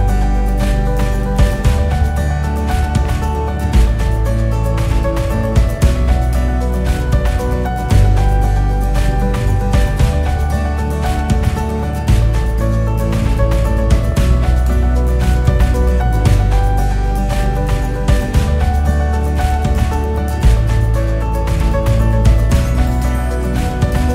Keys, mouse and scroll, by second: 0.4-0.9 scroll up 3, 0.9 scroll down 3, 1.2 scroll up 4, 2.5-5.7 typing, 6.8 click, 7.6-8.1 scroll up 5, 8.1-9.4 scroll down 13, 9.4-9.9 scroll up 12, 10.2 scroll down 6, 11.0 click, 16.9-18.7 drag.